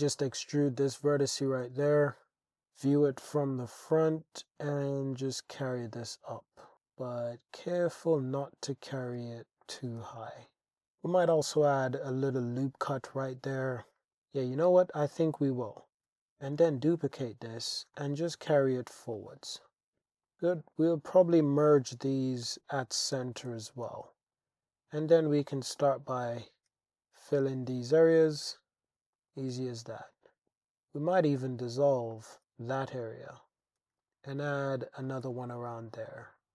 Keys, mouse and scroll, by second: 1.0 click, 1.6 Tab, 2.6 alt+z, 3.3 g, 3.5 z, 6.7 g, 7.9 click, 7.9-10.2 typing, 9.6 click, 11.0-13.0 drag, 14.0 alt+click, 15.9 super+z, 15.9 e, 16.6 shift+d, 17.7 g, 17.9 y, 19.1 click, 20.0 alt+z, 20.3 click, 21.3 m, 23.5 alt+z, 23.9 alt+z, 24.2 click, 25.2 f, 25.4 click, 26.2 click, 26.7 f, 27.4 click, 28.1 f, 28.9 alt+z, 29.2 click, 29.5 click, 30.5 x, 32.1 click, 32.4 super+z, 32.8 x, 33.8 super+r, 34.0 click, 35.1 click, 35.2 Tab, 35.7-36.4 drag.